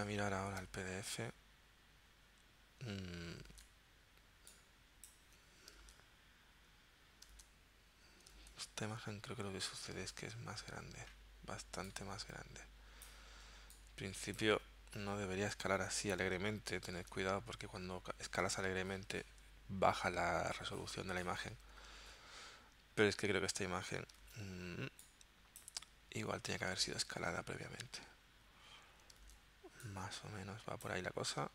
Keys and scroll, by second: 3.5 super+Tab, 5.9 super+Tab, 7.4 super+Tab, 8.4 super+Tab, 10.0 super+Tab, 15.8 super+Tab, 17.0 super+Tab, 22.0 super+Tab, 24.2 super+Tab, 26.8 super+Tab, 29.3 super+Tab.